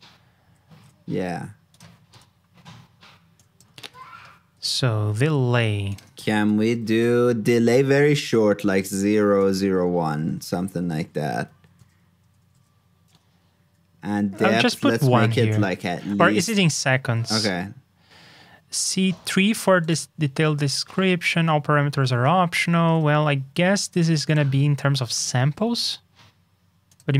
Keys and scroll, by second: 0.4 alt+shift+Down, 3.7 super+v, 16.1 super+Tab, 22.8 super+Tab.